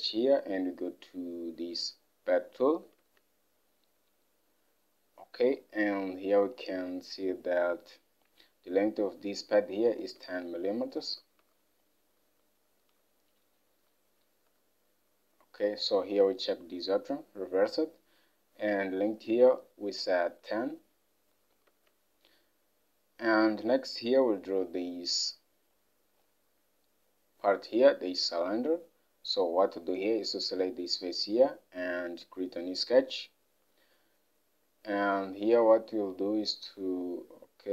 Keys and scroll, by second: 3.1 alt+Tab, 10.2 alt+Tab, 11.5 Home, 21.8 alt+Tab, 28.6 alt+Tab.